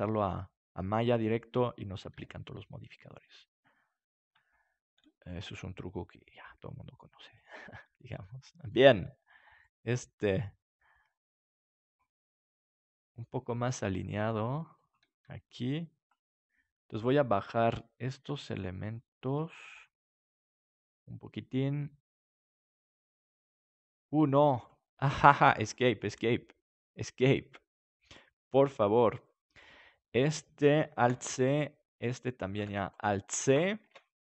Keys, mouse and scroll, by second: 0.8 right click, 2.1 g, 4.4-6.0 middle drag, 6.0-7.1 right drag, 6.4 g, 7.6-9.1 drag, 12.8 middle click, 13.8 r, 15.2 g, 17.3 right click, 17.9 click, 19.3-22.4 right drag, 28.2 Escape, 30.0 right click, 30.9 alt+c, 32.0-33.8 right drag, 32.5 alt+c, 33.8 ctrl+s.